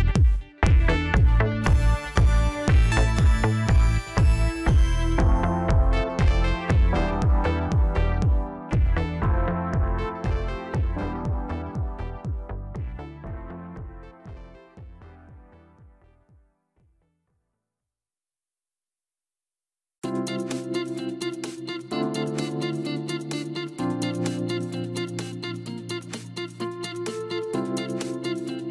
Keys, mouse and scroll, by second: 2.2-3.0 drag, 3.6-4.4 drag, 5.2 click, 15.2 click, 16.0 scroll up 2, 16.6 scroll down 2, 17.1-18.3 middle drag, 18.3-18.9 scroll up 1, 18.9-19.3 scroll up 3, 19.5-21.7 middle drag, 21.7 click, 22.6 click, 23.9 click, 25.5-26.0 scroll down 1, 26.0-27.0 middle drag, 27.0 KP_0, 28.2 scroll up 1.